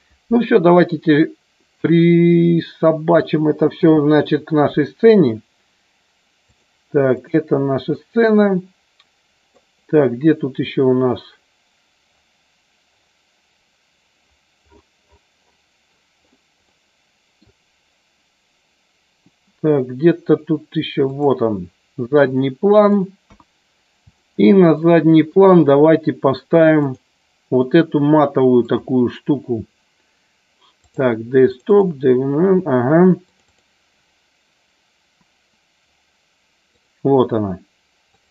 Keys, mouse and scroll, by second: 2.1 click, 3.7 n, 7.2 click, 8.0-9.6 middle drag, 16.7 middle click, 21.2 click, 22.3 middle click, 23.4 KP_1, 24.2 shift+middle click, 25.3 click.